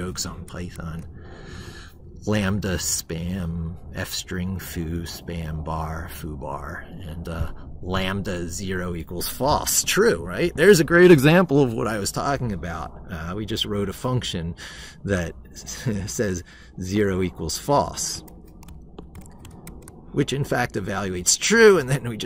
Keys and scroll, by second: 18.2 ctrl+c, 19.6 ctrl+v.